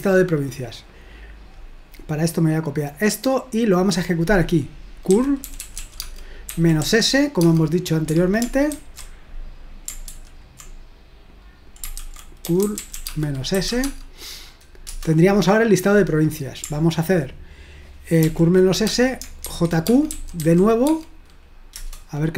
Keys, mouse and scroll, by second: 0.0 click, 0.2 click, 0.9 middle click, 2.8 click, 3.3 click, 4.9-7.4 typing, 8.7 ctrl+alt+v, 10.1 ctrl+p, 12.0 ctrl+a, 12.2-14.1 typing, 14.9 Return, 18.2 ctrl+p, 18.9-21.1 typing, 21.8 Return.